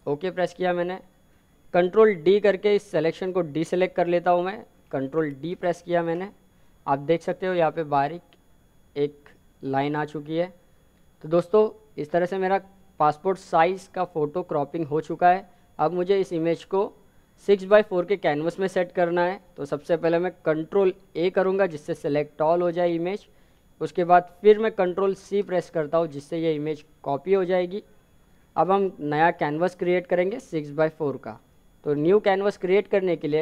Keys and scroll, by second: 19.8 ctrl+a, 24.8 ctrl+c.